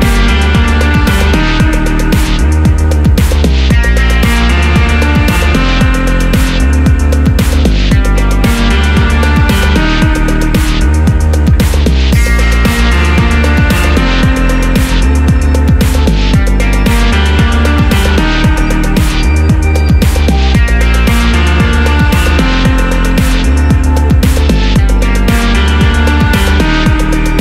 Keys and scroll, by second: 22.1 super+d, 25.3 Right, 25.5 Right, 25.6 Right, 25.7 Right.